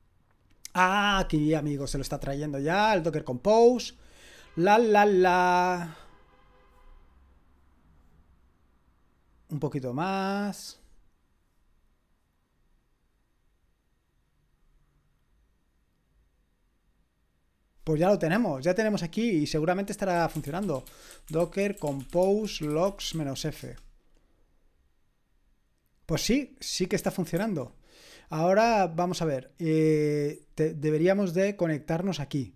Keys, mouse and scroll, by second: 19.9-23.8 typing, 27.4 ctrl+c.